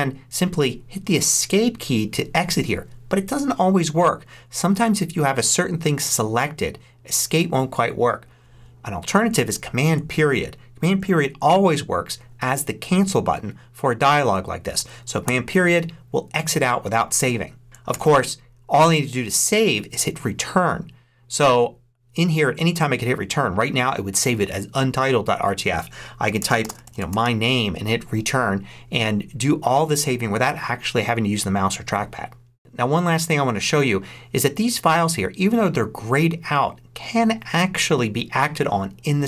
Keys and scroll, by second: 15.1 super+., 17.8 super+s, 26.1-27.6 typing.